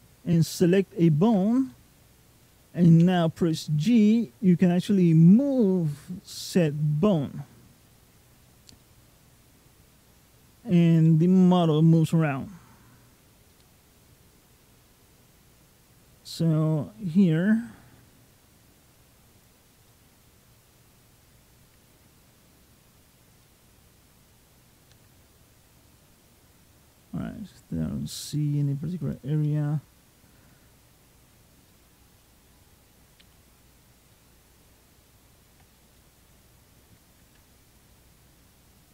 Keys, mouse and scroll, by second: 0.5 ctrl+click, 2.8 g, 8.6 middle click, 10.9 middle click, 12.6-13.4 scroll up 3, 13.3 middle click, 16.2 r, 19.7 middle click, 21.5 g, 23.2 middle click, 24.0-24.7 scroll down 4, 24.7 g, 29.3 middle click, 30.7 scroll down 1, 30.9-31.5 scroll up 2, 31.5 middle click, 32.4-33.0 scroll down 1, 33.0 middle click, 33.9 middle click, 35.6 scroll up 1, 35.8 middle click, 37.5 ctrl+click, 38.7 ctrl+click.